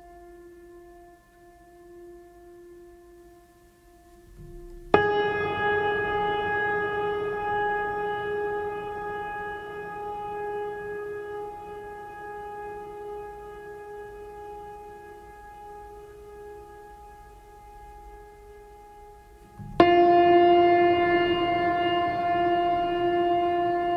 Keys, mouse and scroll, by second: 0.9-1.8 scroll up 5, 2.8-3.4 drag, 16.5 scroll down 1, 23.8 click.